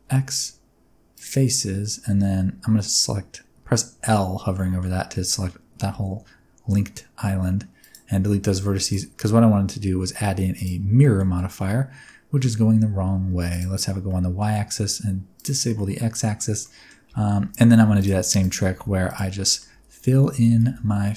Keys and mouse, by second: 2.0 alt+a, 3.9 l, 4.6 middle click, 5.8 x, 8.1 Tab, 8.7-10.6 drag, 10.9 middle click, 11.6 middle click, 13.4 click, 14.0 middle click, 15.3 click, 15.7-16.1 middle drag, 16.5 middle drag, 17.0 Tab, 17.8-21.1 typing, 17.9 click, 18.4 shift+click, 19.0 click, 19.4 middle click, 21.0 middle click.